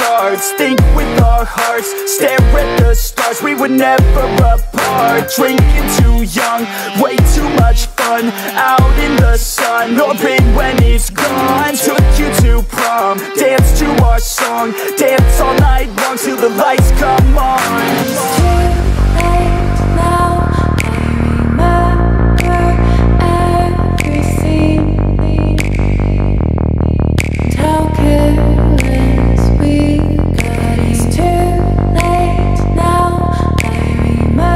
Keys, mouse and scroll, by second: 14.5 ctrl+Num_Lock, 14.9 ctrl+=, 16.9 ctrl+-, 19.7-23.8 drag, 23.8 ctrl+=, 26.6 click, 30.6 click, 34.2 ctrl+Num_Lock, 34.2 click.